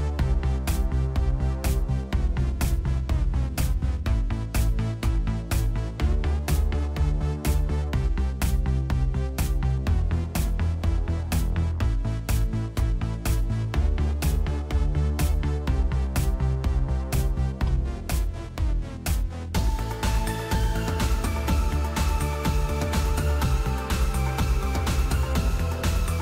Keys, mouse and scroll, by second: 2.3 Return, 6.8 s, 7.2 Return.